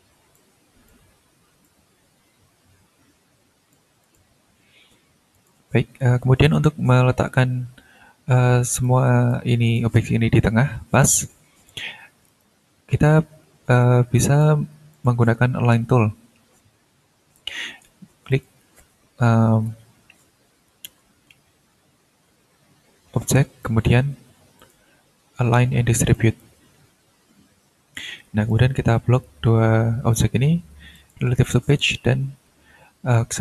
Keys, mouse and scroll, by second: 0.3 ctrl+click, 1.6-3.9 drag, 4.0 ctrl+click, 4.3 ctrl+scroll down 1, 5.3 click, 8.7 click, 9.3-9.9 shift+drag, 11.0 click, 12.2 right click, 14.1 click, 14.9 click, 18.3 click, 23.6 click, 24.6 click, 26.1 click, 28.5 click, 30.9 click, 31.4 click.